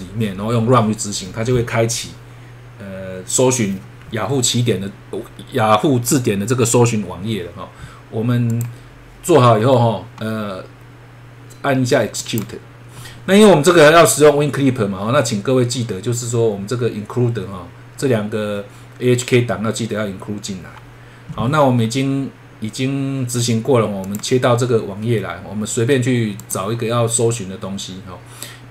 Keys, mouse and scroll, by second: 12.2 click, 24.0 click, 26.4 click, 27.9-28.7 scroll up 1.